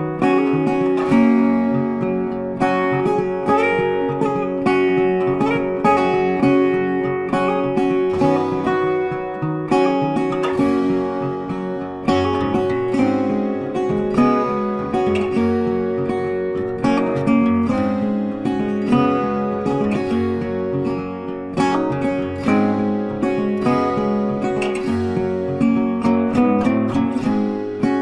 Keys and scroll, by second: 3.9 ctrl+t, 24.2 ctrl+t.